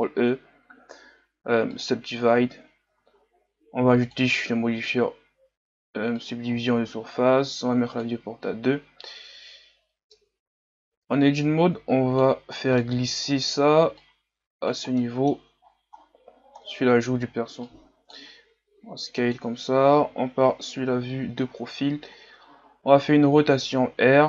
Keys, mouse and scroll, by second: 1.9 ctrl+e, 2.9 Tab, 6.3-9.1 drag, 9.1-9.5 scroll down 2, 10.2 Tab, 11.3-12.6 drag, 12.6 scroll down 1, 12.8 middle click, 13.2 scroll up 4, 14.0 click, 15.0 middle click, 15.6-17.5 scroll down 13, 17.5 scroll down 1, 17.6 click, 18.4 s, 20.0 KP_3, 21.0-21.4 scroll up 3, 21.4 scroll down 5, 22.1-22.9 scroll down 5.